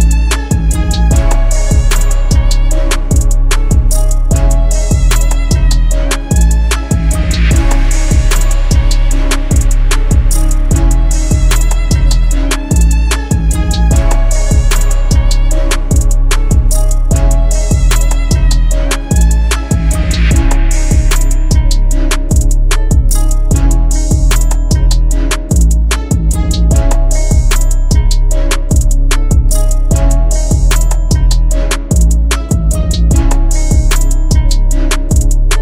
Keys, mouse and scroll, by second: 26.8 alt+click, 33.7 right click.